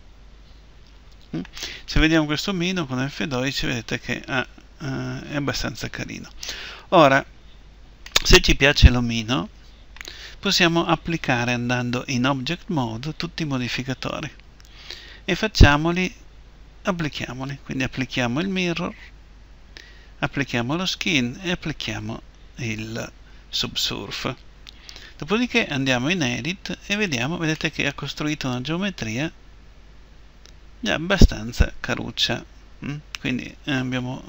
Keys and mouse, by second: 4.9 F12, 4.9 Escape, 12.1 Tab, 18.2-25.9 drag, 25.9 Tab, 27.7 click.